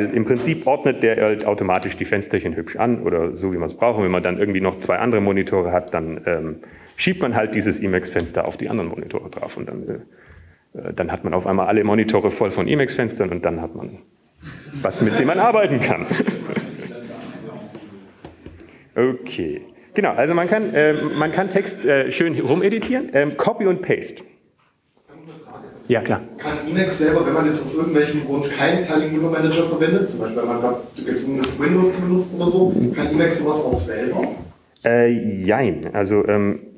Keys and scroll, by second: 3.9 super+Return, 13.7 super+q.